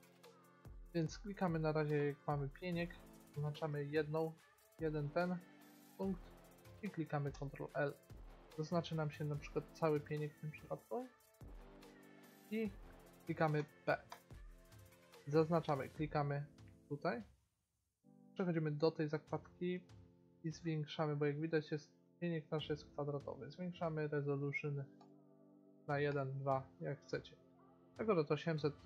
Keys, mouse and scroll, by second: 4.7-7.5 middle drag, 7.5 ctrl+l, 8.8 g, 13.7 p, 15.8-17.7 drag, 18.3 click, 19.2 middle click, 25.1-28.0 drag, 28.5 middle click.